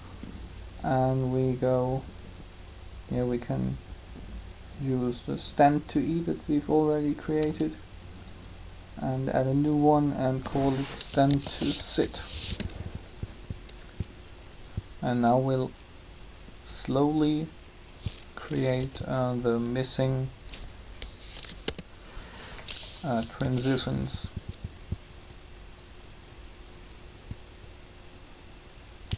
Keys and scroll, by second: 11.2-11.9 typing, 12.2 Return, 18.8 b, 21.2 Delete, 21.4 Return, 23.4 alt+a.